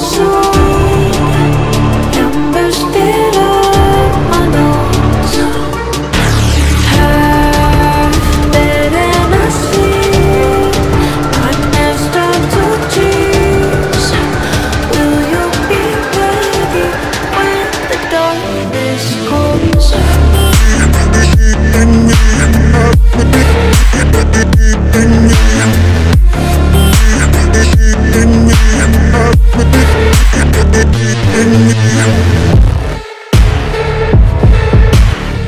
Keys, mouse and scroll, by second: 1.0 alt+click, 1.5 alt+scroll up 1, 2.6 alt+scroll down 1, 3.0 b, 3.6-4.1 [, 4.4-9.1 drag, 9.1 scroll down 1, 9.8 click, 10.3 scroll down 1, 10.7 click, 11.5 scroll down 1, 12.1 click, 12.7 scroll down 1, 13.6-14.8 drag, 14.8-15.2 scroll down 2, 15.9 alt+scroll up 1, 17.0 click, 17.6 alt+scroll up 1, 18.2-20.0 drag, 20.0 scroll down 1, 21.0 click, 21.5-23.4 drag, 23.5 click, 23.8 scroll down 2, 23.8 typing, 24.4-29.3 drag, 25.7 typing, 29.3 scroll up 1, 29.6 typing, 30.0-30.3 scroll down 2, 30.8 click, 31.4 alt+scroll down 1, 32.0 b, 32.7 click, 34.1 alt+scroll down 1, 34.9 alt+scroll up 1, 35.2 click.